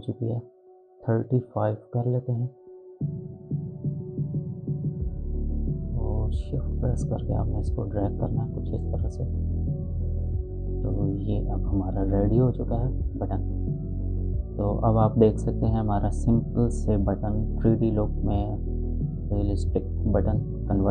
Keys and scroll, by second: 1.2 3, 1.6 5, 2.1 Return.